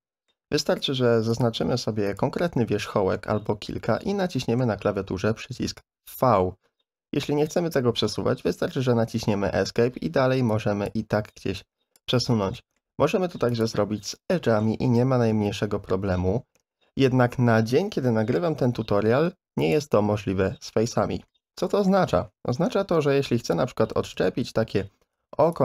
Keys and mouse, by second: 0.4 2, 0.9 1, 1.3 click, 2.1 shift+click, 3.2 middle click, 4.3 shift+middle click, 5.5 v, 10.6 click, 11.6 click, 12.5 middle click, 12.9 2, 13.5 click, 14.1 middle click, 14.9 v, 21.3 middle click, 24.0 a, 24.1 a, 24.8 3, 25.2 c.